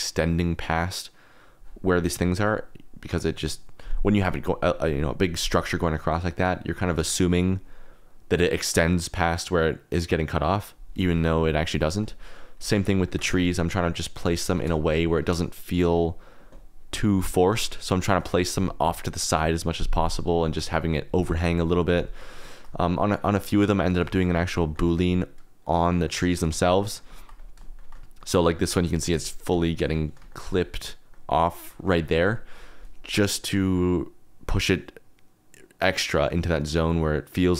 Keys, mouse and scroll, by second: 12.5 click, 13.0 shift+click, 14.5 KP_0, 15.8 click, 16.9 click, 20.3 shift+click, 22.4 click, 23.4-24.0 drag, 24.0 shift+click, 24.6 shift+click, 25.0 click, 25.5 KP_Decimal, 25.8 drag, 26.5 shift+click, 26.6 middle click, 26.8 middle click, 27.3 click, 27.7 shift+middle click, 28.1 middle click, 28.7 click, 28.8 middle click, 29.2 shift+middle click, 29.6 middle click, 30.3 shift+middle click, 31.1 middle click.